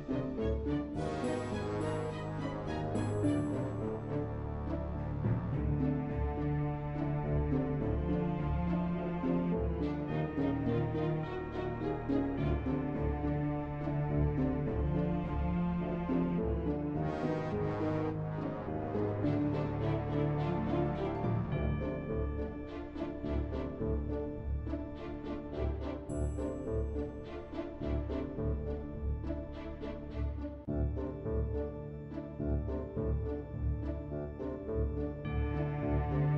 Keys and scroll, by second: 15.4-18.1 typing.